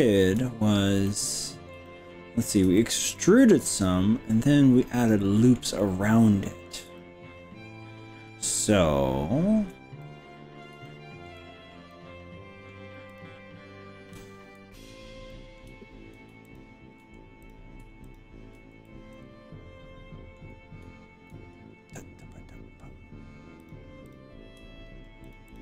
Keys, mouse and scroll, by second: 0.8 scroll up 3, 1.1 middle click, 2.0 shift+middle click, 2.8-5.6 middle drag, 5.8-6.8 middle drag, 7.0-9.8 shift+middle drag, 10.0 middle click, 10.9 shift+middle click, 11.5-11.8 scroll down 2, 12.0 middle click, 13.2 click, 15.4 middle click, 16.6 shift+click, 17.4 click, 18.2 ctrl+click, 18.8-19.9 middle drag, 20.0 middle click, 23.6 click, 25.2 ctrl+click.